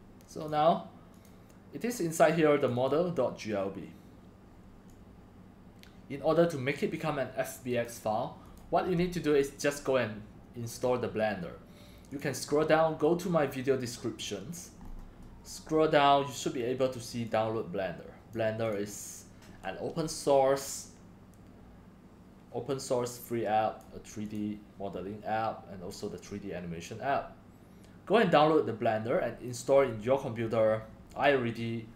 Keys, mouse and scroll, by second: 1.2 click, 2.6 click, 2.7 click, 4.9-9.8 drag, 12.1 click, 14.8 scroll down 3, 15.2 scroll, 15.5 scroll down 1, 16.4 click, 17.2-18.3 drag, 18.3 right click, 20.6 click, 23.8 click, 29.1 click, 31.1 click.